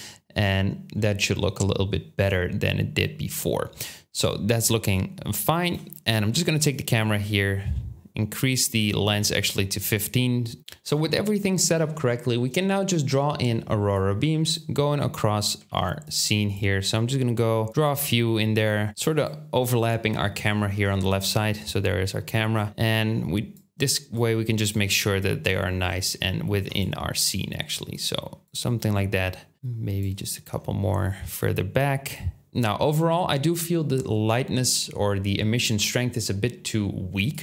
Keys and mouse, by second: 1.2-5.6 right drag, 5.6-6.6 middle drag, 10.6 Tab, 10.6 right click, 10.6 a, 10.6 x, 11.0-15.6 drag, 15.6 ctrl+z, 16.2-18.9 drag, 25.6 ctrl+z, 25.9 ctrl+z, 26.3 ctrl+z, 32.5 Tab.